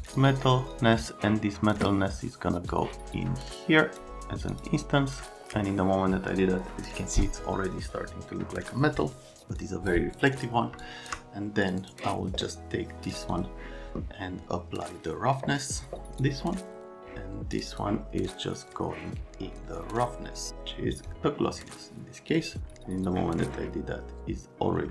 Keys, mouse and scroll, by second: 0.0 click, 0.2 click, 0.7 click, 2.7 click, 4.5 click, 9.6 click, 10.2 click, 10.8 shift+click, 11.7 click, 17.5 click, 17.7 click, 18.7 click, 22.3 click.